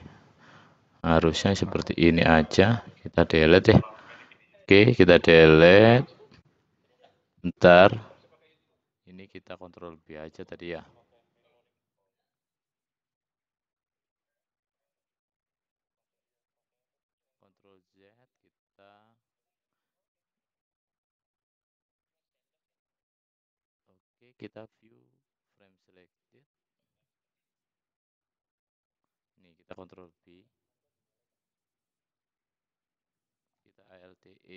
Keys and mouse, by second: 0.9 l, 1.7 l, 2.2 l, 3.2 Delete, 7.2-8.6 drag, 8.7 shift+click, 9.6-11.6 shift+drag, 11.8 shift+click, 13.0 shift+click, 13.8-14.9 shift+drag, 15.0 shift+click, 17.0 ctrl+z, 18.3 shift+click, 18.5 shift+click, 19.6 shift+click, 21.2 shift+click, 21.5 shift+click, 26.3-28.9 drag, 30.0 ctrl+b, 33.6 alt+e.